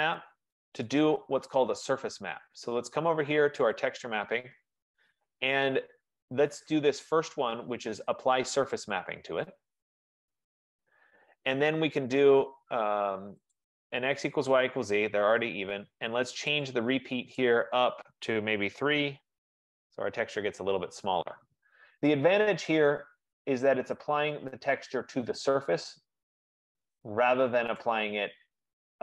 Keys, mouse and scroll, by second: 0.4 scroll, 1.0 click, 1.3 middle click, 4.0 click, 9.0 click, 13.7 click, 16.7 click, 17.6 click, 18.8 3, 19.0 Tab, 24.3 right click, 24.9 middle click, 25.1 middle click, 25.3 middle click, 27.1-28.5 scroll, 28.5 right click, 28.6-29.0 scroll.